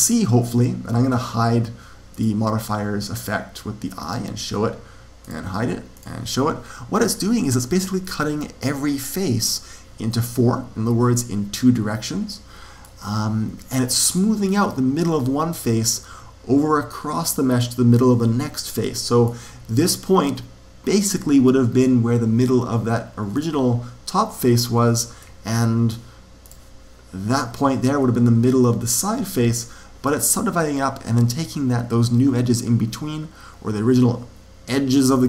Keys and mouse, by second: 2.0 click, 3.9-7.7 drag, 7.0 right click, 8.8-12.2 middle drag, 14.0-15.6 middle drag, 15.9-19.0 middle drag, 20.8-22.7 middle drag, 23.3 click, 25.1-26.5 middle drag, 26.4 click.